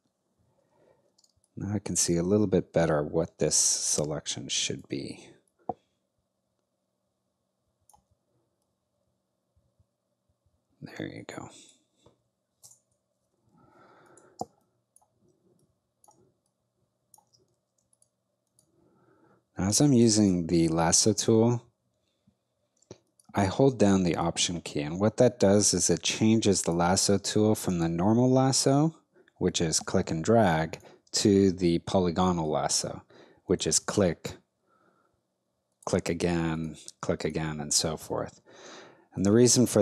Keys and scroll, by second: 1.2 space, 12.6 alt+BackSpace, 14.4 space.